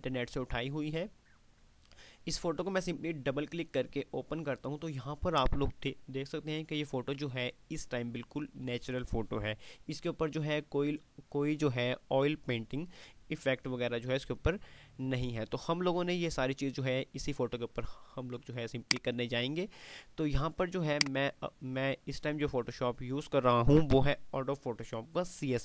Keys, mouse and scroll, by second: 6.3-6.8 scroll up 1, 16.1-16.7 scroll down 1, 19.1 click.